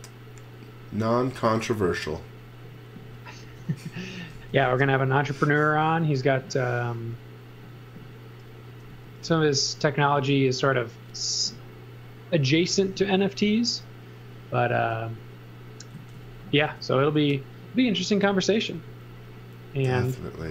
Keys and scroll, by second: 3.8-4.8 typing, 8.9 x, 9.2 v, 12.6 x, 12.9 v, 14.7 space, 15.9 z, 16.6 b.